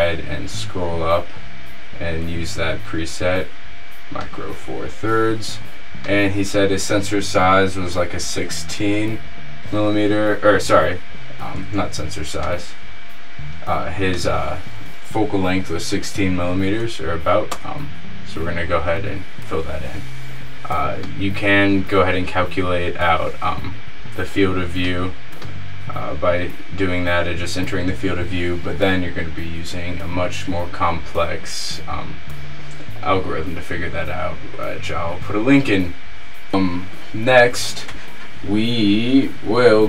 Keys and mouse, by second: 6.2-8.1 drag, 14.4-16.1 drag, 16.3-21.1 middle drag, 23.0-25.0 middle drag, 27.5-31.8 middle drag, 39.6-39.8 middle drag.